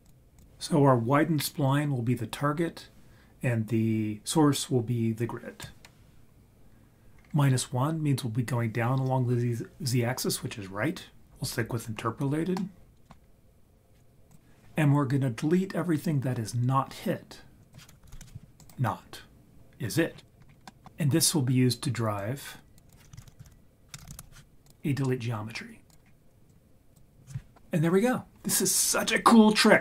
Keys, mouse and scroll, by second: 0.3-0.8 drag, 7.2-7.6 scroll up 4, 12.6 middle click, 17.6 click, 17.6 BackSpace, 18.6 click, 20.1-20.9 scroll down 5, 20.6 middle click, 22.2 click, 22.8 click, 23.1 shift+a, 24.0 BackSpace, 26.1-26.5 scroll up 2, 26.5-26.9 drag, 27.8-28.2 scroll up 4.